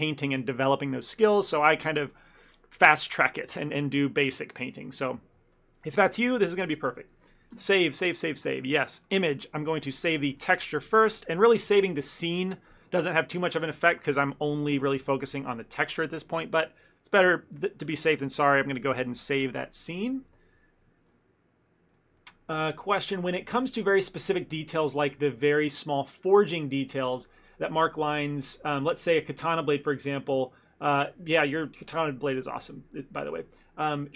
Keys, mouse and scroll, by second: 9.1 click, 17.3 ctrl+s.